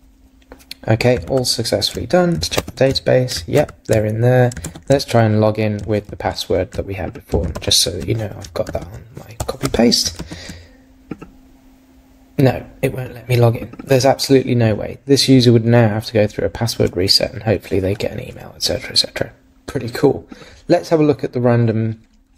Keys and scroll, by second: 1.3 super+Tab, 2.6 super+r, 3.6 super+Tab, 4.6 super+`, 7.6 super+v, 8.7 super+z.